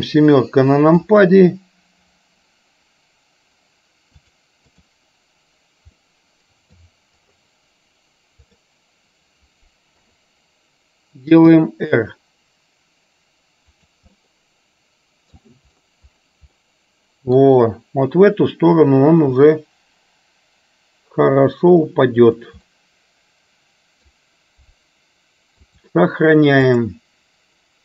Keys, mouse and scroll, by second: 0.0 KP_7, 4.2 click, 6.1 middle click, 10.0 KP_7, 11.5 r, 14.2-15.5 middle drag, 16.7 middle click, 19.4 g, 22.7-24.1 middle drag, 24.1-25.6 scroll down 1, 25.6-27.1 drag.